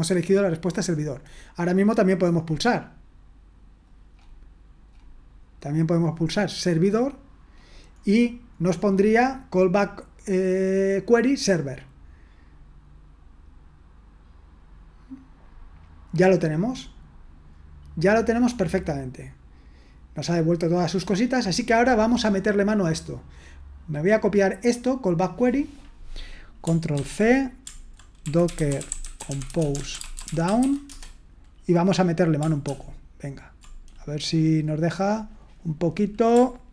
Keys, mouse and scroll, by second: 0.9-2.1 scroll down 1, 4.9-5.8 scroll down 1, 6.6-9.1 drag, 16.2-17.0 scroll down 1, 17.0-17.6 scroll down 1, 17.6-18.7 scroll down 1, 20.2-21.1 scroll down 1, 21.4-22.4 drag, 22.4-23.4 scroll up 1, 23.4-26.1 drag, 26.9 ctrl+c, 28.0-31.1 typing, 32.6 ctrl+p.